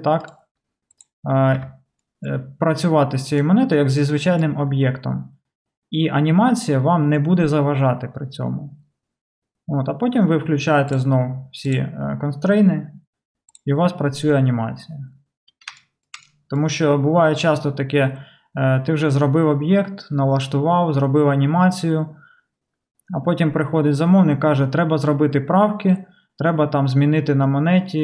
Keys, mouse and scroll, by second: 1.7 Tab, 10.9 click, 11.0-13.6 middle drag, 11.7 click, 13.6-28.0 drag.